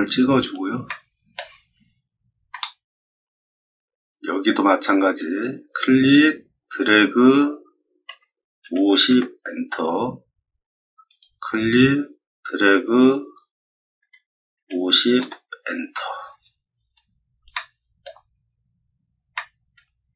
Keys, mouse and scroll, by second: 0.0-0.4 scroll down 4, 0.8 shift+middle click, 1.7-2.4 scroll up 3, 2.4 middle click, 3.1 middle click, 4.9 click, 8.0 5, 8.6 0, 9.0 Return, 11.0 click, 13.9 5, 14.5 0, 15.1 Return, 16.4-16.8 scroll down 4, 17.5 shift+middle click, 18.4-18.8 scroll up 6, 19.3 shift+middle click, 20.1 middle click.